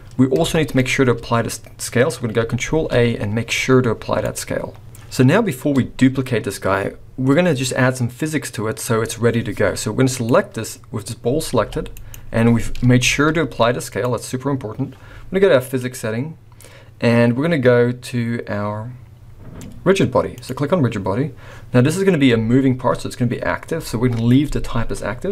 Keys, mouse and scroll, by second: 0.1 scroll up 1, 0.4 shift+middle click, 0.7-1.2 scroll up 2, 2.6 ctrl+a, 4.8 scroll down 5, 5.4-6.4 scroll up 6, 10.1 click, 11.2-11.5 scroll down 2, 11.6 g, 13.0 ctrl+a, 15.6 click, 20.3 click, 22.0-23.4 scroll up 1.